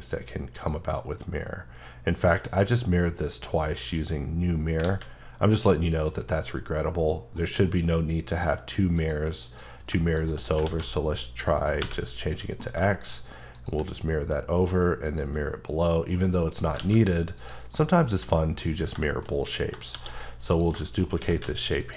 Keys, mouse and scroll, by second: 5.6 click, 10.7 x, 13.5 shift+click, 16.1 right click, 16.8 alt+a, 17.4 click, 17.7 middle click, 18.7-19.0 scroll up 3, 19.0 shift+middle click, 19.9 shift+d, 20.5 click, 20.8 shift+middle click, 21.2-21.9 typing, 21.8 click.